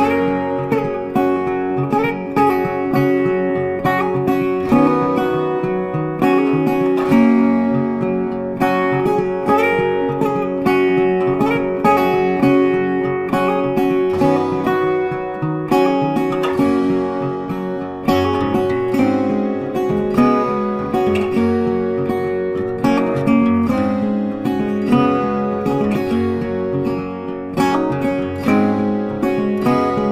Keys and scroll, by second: 25.8 ctrl+t.